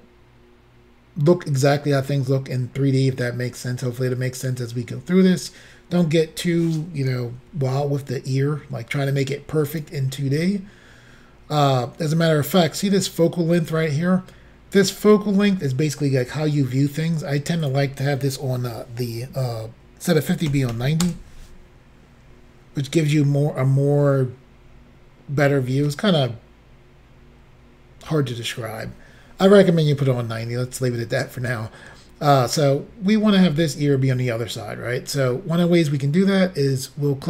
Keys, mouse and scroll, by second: 7.4 s, 9.7 click, 17.7 click, 20.6 typing, 21.1 Return, 22.0-22.7 scroll down 5, 31.4-32.6 scroll up 1.